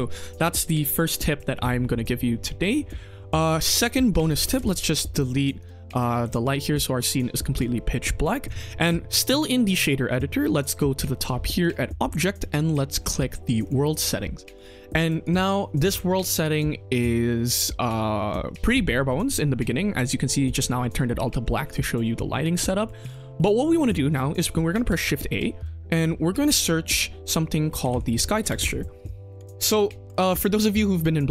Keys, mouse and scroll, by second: 0.7 middle click, 4.3 click, 4.5 x, 4.9 click, 5.5 click, 5.9 click, 6.1 x, 11.5-13.7 drag, 14.1 middle drag, 14.5 click, 15.1 click, 15.8 click, 16.3 click, 16.9 click, 17.5-17.9 middle drag, 17.9 scroll down 2, 18.2-18.6 middle drag, 18.6-19.0 scroll up 2, 19.0 middle drag, 20.1-21.2 scroll up 1, 21.2 middle click, 22.3-22.8 drag, 23.3 middle click, 23.8 click, 24.6 shift+a, 29.7 middle click, 30.0 click, 30.3 middle click, 31.0-31.3 scroll down 2.